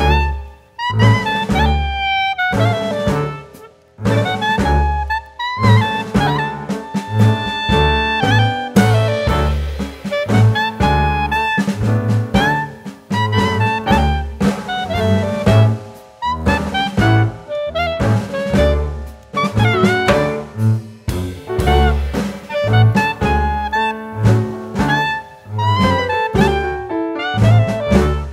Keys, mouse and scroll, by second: 2.2 middle click, 2.6-3.0 scroll down 1, 3.1-4.0 scroll down 3, 4.0 click, 4.0 scroll down 1, 4.3 middle click, 5.0 click, 6.0 scroll down 1, 6.2 middle click, 6.8 click, 7.1 middle click, 8.4 s, 9.7 s, 11.0 scroll up 1, 11.2 middle click, 12.2 click, 12.5 middle click, 13.2-13.7 scroll up 1, 13.7 middle click, 13.7-14.0 scroll up 3, 14.1 click, 14.6 scroll down 1, 14.8 click, 16.1 click, 17.1 middle click, 20.2 click.